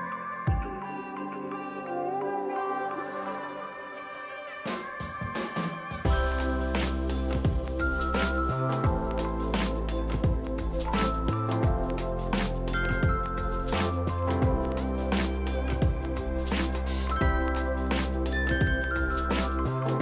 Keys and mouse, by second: 0.0 KP_7, 0.1 click, 0.7 y, 0.9 y, 1.0 click, 10.5 ctrl+click, 11.1 click, 13.5 click, 16.3 ctrl+click, 16.5 ctrl+click, 16.9 click, 18.8 ctrl+1, 18.9 click.